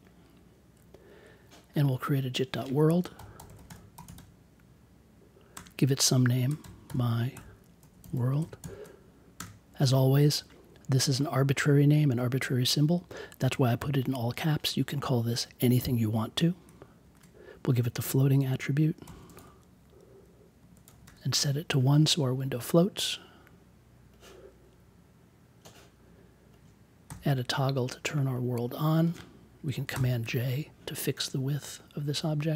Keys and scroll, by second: 2.8-9.3 typing, 17.0 shift+2, 18.7-21.3 typing, 27.0 t, 29.9 super+j.